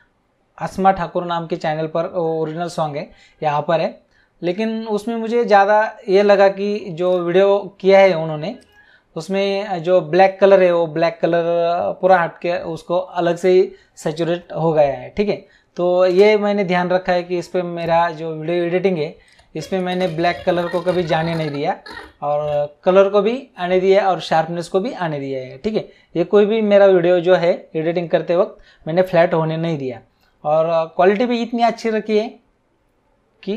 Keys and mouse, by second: 7.0 click, 8.5 click, 16.1 space, 17.7 click, 19.2 click.